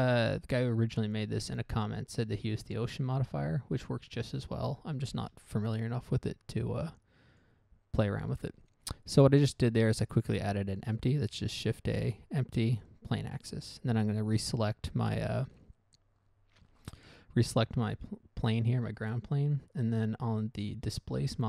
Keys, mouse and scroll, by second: 5.6 shift+a, 7.7 click, 7.8 click, 11.6 shift+a, 13.7 right click.